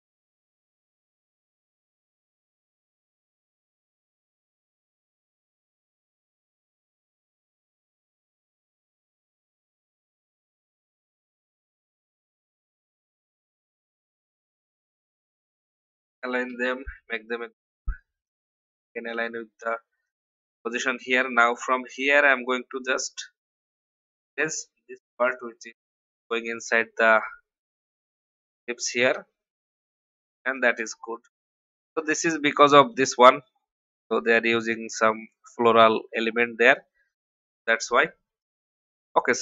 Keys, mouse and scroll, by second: 0.4-1.4 drag, 1.0 v, 1.6-1.9 alt+scroll up 1, 2.5 click, 7.0-9.2 alt+drag, 9.9 ctrl+r, 11.3 click, 12.0 click, 12.2 click, 12.4 click, 14.1 shift+click, 15.2 click, 16.4 ctrl+g, 17.5 shift+click, 18.2 click, 22.7 shift+e, 23.2 alt+scroll up 1, 24.4-25.4 drag, 25.7-26.1 alt+scroll down 1, 26.9 alt+scroll up 1, 28.3 click, 29.5-29.9 alt+scroll down 1, 30.3 v, 30.5 click, 31.3 alt+scroll down 1, 32.8-33.3 alt+scroll down 1, 33.5 alt+scroll up 1, 36.1 alt+scroll down 1, 36.7 alt+scroll down 1, 39.0-39.4 alt+scroll up 1.